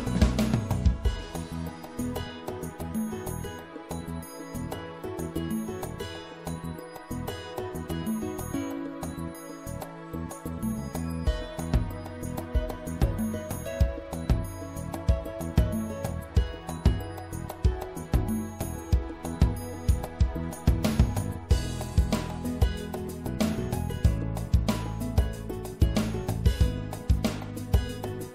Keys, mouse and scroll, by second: 3.7 middle click, 4.6 right click, 7.0 middle click, 7.2-8.7 drag, 10.6-11.7 drag, 11.7-13.8 middle drag, 15.9-18.1 right drag, 16.6-18.4 drag, 19.9-21.4 middle drag, 21.4-23.1 drag, 23.1-25.2 middle drag, 25.2 w.